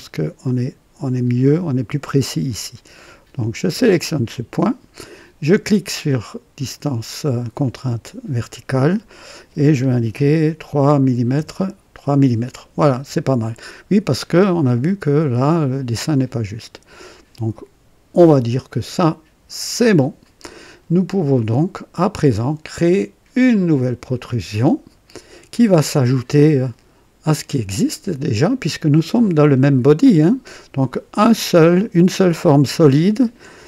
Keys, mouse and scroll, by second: 3.8 click, 7.3 click, 10.0 KP_3, 11.3 KP_Enter, 19.7 click, 21.3 click, 23.5 click.